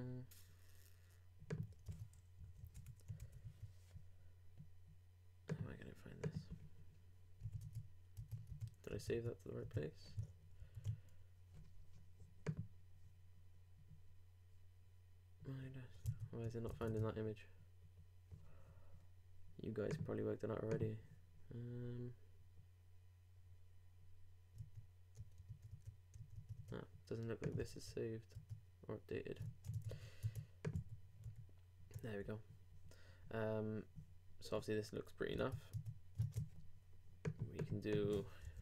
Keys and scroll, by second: 2.6 alt+Right, 2.7 alt+BackSpace, 7.4 super+w, 7.6 super+Tab, 10.1 shift+super+Tab, 10.6 alt+shift+super+s, 16.0 super+Tab, 27.7 super+s, 28.3 super+Tab, 29.4 shift+super+Tab, 29.9 super+Tab, 30.7 super+w, 31.2 super+r, 35.4 super+Tab, 36.2 shift+super+Tab.